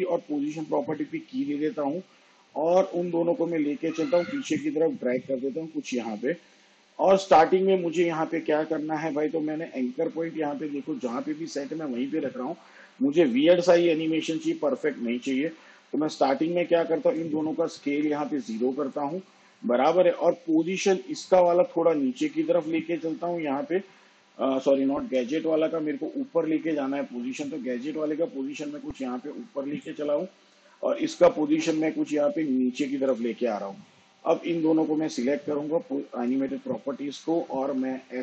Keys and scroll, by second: 19.8 0, 26.8 ctrl+z.